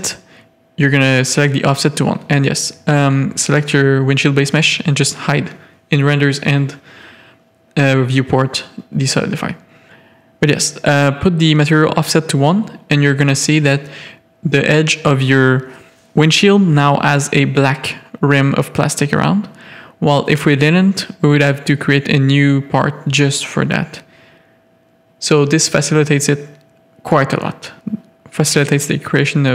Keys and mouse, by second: 1.8 click, 3.0 Tab, 3.4 click, 5.7 click, 8.0 Tab, 10.5 click, 11.2 Tab, 13.9-15.0 middle drag, 15.6-16.6 middle drag, 20.6 Tab, 21.0 middle click, 21.2 z, 21.7 a, 22.0 shift+middle click, 22.4 click, 23.0 z, 23.2 click, 23.9 z, 25.0 3, 25.2 click, 25.5 x, 26.9 1, 27.3 z, 27.5 a.